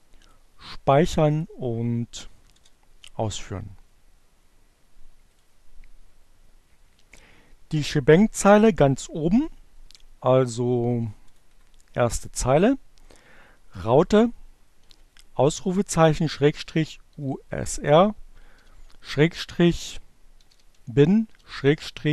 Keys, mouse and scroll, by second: 0.3 click, 2.0 click, 2.3 Up, 3.2 Return, 4.7-5.7 drag, 9.9 click, 10.2 Return, 11.8 shift+1, 13.9-15.7 typing, 16.7 shift+7, 19.0-22.1 typing.